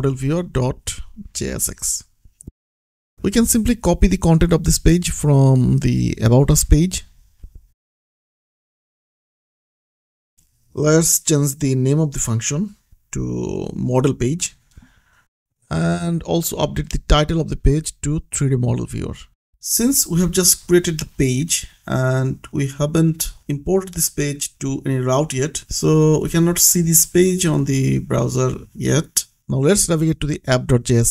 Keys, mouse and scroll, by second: 0.0-1.3 typing, 3.1 Return, 6.0 click, 7.9 ctrl+c, 8.3 click, 8.8 middle click, 9.1 click, 9.6 ctrl+v, 11.0 click, 12.4 ctrl+d, 13.7 d, 14.0 shift+Right, 15.5-16.7 typing, 18.4-21.6 typing, 22.2 shift+click, 22.8-24.7 typing, 25.3 ctrl+s, 26.0 click, 29.4 click.